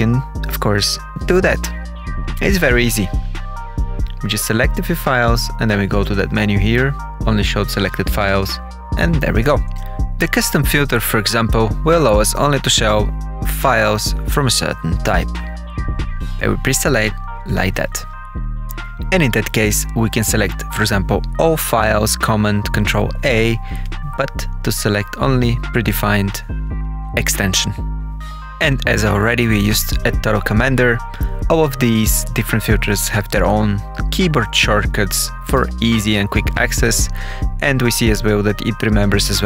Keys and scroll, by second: 0.7 Insert, 1.7 Insert, 11.3-13.9 typing, 14.2 Return, 14.8 Page_Down, 17.2 ctrl+a, 18.0 Page_Up, 18.9 Page_Down, 39.0 ctrl+F10.